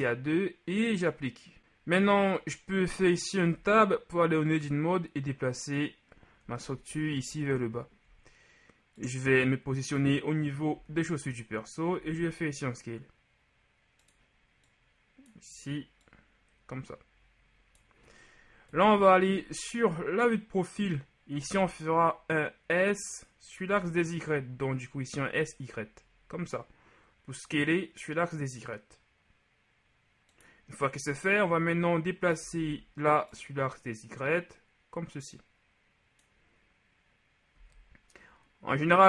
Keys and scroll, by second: 3.7 Tab, 10.9 z, 12.1 s, 18.8 KP_3, 21.5 s, 23.7 y, 32.7 ctrl+z, 37.6 z.